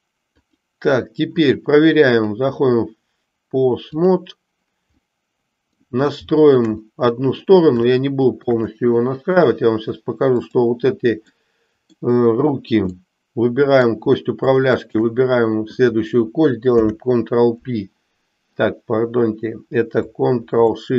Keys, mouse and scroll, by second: 0.3 click, 2.3-4.0 drag, 5.0 middle click, 6.2 shift+middle click, 6.9 middle click, 8.0 shift+middle click, 8.9 middle click, 11.4 middle click, 12.9-13.9 middle drag, 14.8 shift+click, 16.6 ctrl+p.